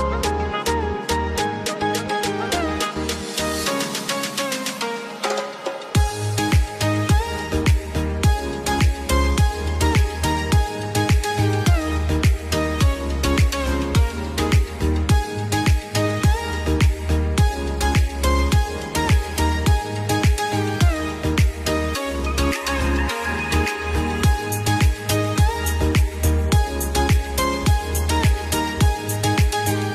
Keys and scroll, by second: 2.4 F2, 5.5 F3, 16.3 F2, 20.2 F3, 28.0 F2.